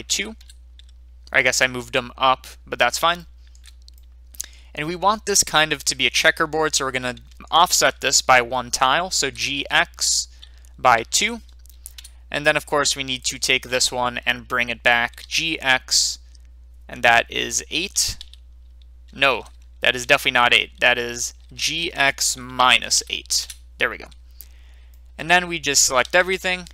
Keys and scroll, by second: 0.1 2, 0.4 Return, 9.2 g, 9.5 x, 10.9 g, 10.9 x, 12.0 Return, 12.0 2, 15.2 g, 18.2 g, 19.3 Return, 20.2 ctrl+z, 21.5 g, 23.4 Return.